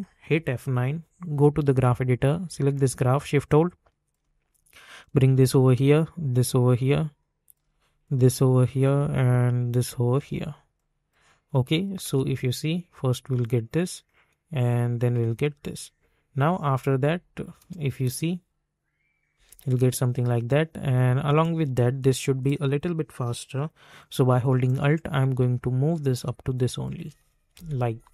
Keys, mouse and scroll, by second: 0.2 F9, 1.5-5.0 drag, 5.0-6.7 drag, 6.7-10.7 drag, 10.7 click, 12.0 space, 15.0 space, 16.4 j, 17.6 space, 24.6-26.6 alt+drag, 26.9 space.